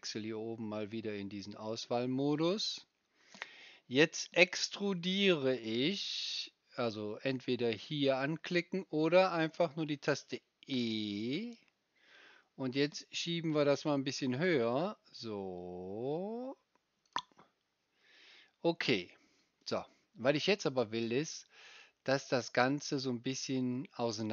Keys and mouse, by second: 1.5-13.7 middle drag, 13.7-17.0 drag, 13.7-17.0 right drag, 17.1 click.